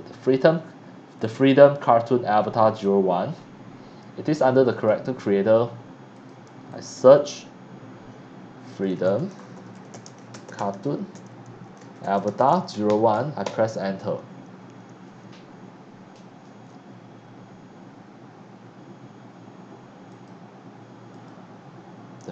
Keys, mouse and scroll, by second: 2.7 click, 6.2 click, 6.7 click, 7.1 click, 7.6-8.1 scroll down 1, 8.7 click, 8.8-13.4 typing, 21.1 click.